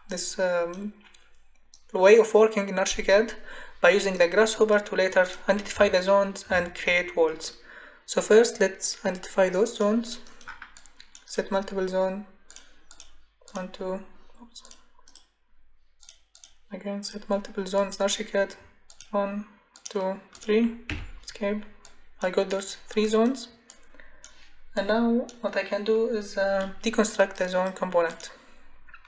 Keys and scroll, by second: 20.9 Escape.